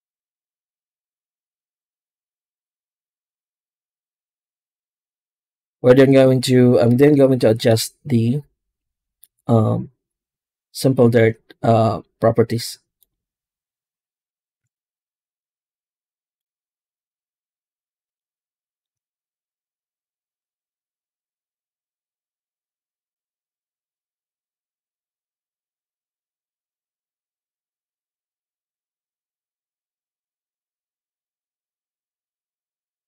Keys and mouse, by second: 0.0 ctrl+space, 1.5 z, 4.2 z, 6.4-7.6 middle drag, 11.0 z, 16.2-17.9 ctrl+shift+drag, 18.3 middle click, 19.0 ctrl+shift+click, 19.6 middle click, 24.0 middle click, 25.4 click, 28.3 click, 30.7-32.4 drag.